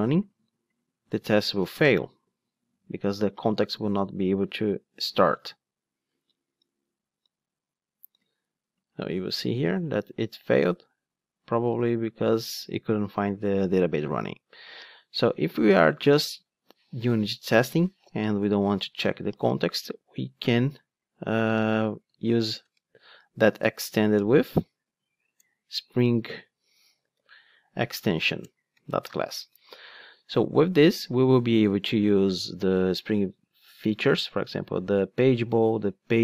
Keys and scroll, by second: 24.2 Return, 25.9 super+z, 28.4 super+z, 28.5 Return.